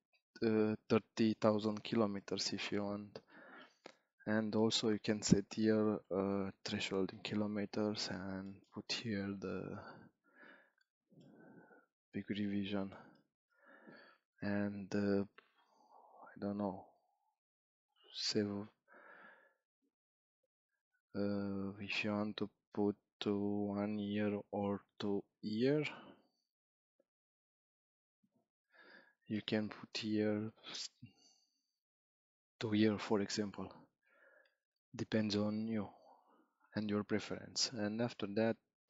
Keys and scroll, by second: 6.1 5, 6.7 0, 9.2 3, 9.8 0, 18.1 7, 31.1 3, 31.9 0.